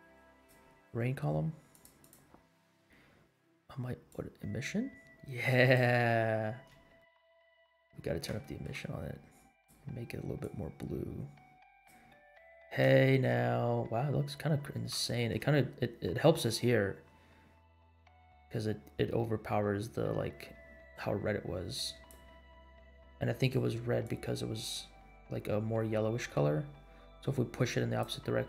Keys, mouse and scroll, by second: 0.3-0.6 drag, 1.7 click, 2.0 click, 4.0-6.0 drag, 6.1-6.6 scroll up 4, 7.0 shift+middle click, 7.9 scroll down 2, 8.4 shift+middle click, 9.5 click, 12.1-12.7 scroll down 4, 13.0 shift+middle drag, 13.5-13.9 scroll up 2, 15.0-15.3 shift+middle drag, 15.0 scroll up 1, 18.3 click, 23.3 click.